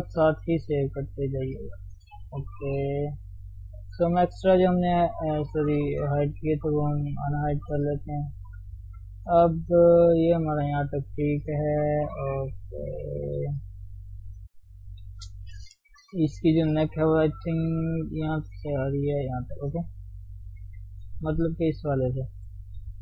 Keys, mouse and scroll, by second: 0.9 ctrl+click, 1.1 scroll down 3, 1.3 shift+middle click, 1.7 Tab, 2.7-3.0 scroll up 1, 3.0-3.9 scroll down 1, 3.9-8.2 drag, 8.2-8.8 scroll up 2, 8.8 shift+middle click, 9.4-13.2 scroll up 1, 13.2 scroll up 1, 13.5 shift+z, 13.6 scroll down 1, 13.7-14.8 middle drag, 14.8 KP_3, 15.1-17.4 scroll up 2, 18.2 click, 18.5 d, 19.3 click, 19.5 d, 19.6-20.0 scroll down 1, 20.0 Tab, 21.1 click, 21.4-22.7 middle drag, 22.7 click, 22.9 middle click.